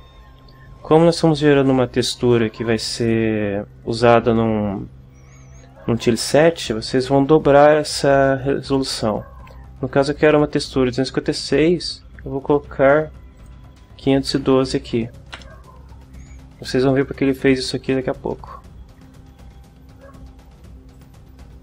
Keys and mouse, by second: 13.4 click, 14.1-15.1 typing, 21.0 click.